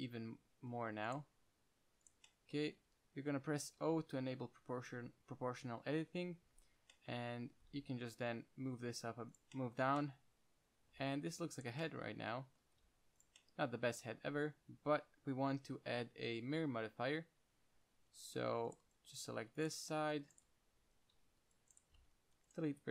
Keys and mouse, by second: 1.4-2.6 right drag, 2.6-9.6 drag, 4.1 o, 7.8 g, 9.7-11.4 middle drag, 13.0 g, 13.5-15.5 middle drag, 16.0 Up, 16.6 KP_1, 17.2 KP_5, 18.6 z, 19.0 right drag, 19.2 c, 20.3-22.4 typing.